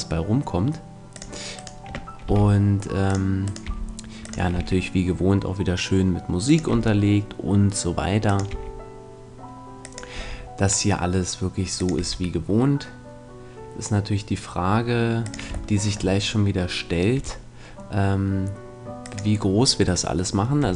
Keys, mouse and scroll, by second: 1.2-3.0 drag, 1.5-3.4 right drag, 2.3 g, 3.1 click, 3.6 g, 4.5 e, 5.3 click, 6.7-13.7 drag, 6.7 e, 8.5 e, 10.1 e, 11.9 e, 15.3-17.5 drag, 15.7-16.9 middle drag, 17.1 e, 19.1-20.7 drag, 20.6 e.